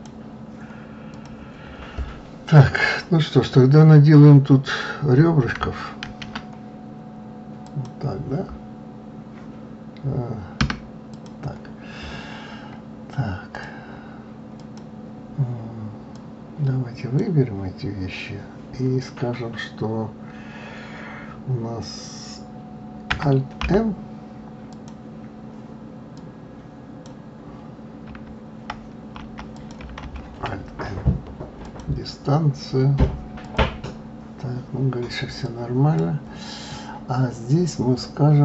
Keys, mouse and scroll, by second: 1.1 click, 2.5 click, 6.0 ctrl+r, 11.1 click, 11.9-13.5 scroll up 3, 13.5 click, 14.5 click, 15.3-16.1 scroll down 2, 16.1 click, 24.7 click, 26.1 click, 29.5 click, 30.0 alt+m, 33.4 click, 35.4 click.